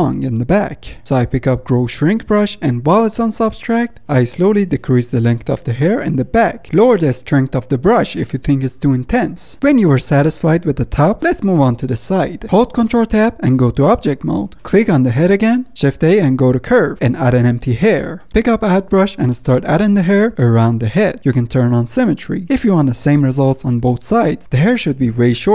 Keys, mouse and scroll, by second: 0.0-0.4 drag, 0.4 middle click, 0.6 drag, 0.8-1.8 shift+middle drag, 1.8-2.5 drag, 2.9 click, 3.7 click, 4.0-4.8 drag, 4.8 f, 5.1-5.7 drag, 5.7 middle drag, 5.9-6.9 drag, 6.9 ctrl+z, 6.9 ctrl+z, 7.0-7.5 drag, 7.5 ctrl+z, 7.6 ctrl+z, 7.7 click, 7.9 middle drag, 8.0-8.4 drag, 8.4 middle drag, 8.6 drag, 8.8 middle click, 8.9-9.5 drag, 9.5 middle click, 9.6-9.9 drag, 9.9 middle click, 10.1 drag, 10.3 middle click, 10.4-10.8 drag, 10.8 middle click, 11.0-12.0 drag, 12.0 middle drag, 12.2 click, 12.4-13.3 middle drag, 14.9 click, 15.6 a, 17.8 shift+a, 18.3 click, 19.3-21.1 drag, 21.1-22.5 middle drag, 22.5-23.5 drag, 23.5-24.2 middle drag, 24.2-25.5 drag.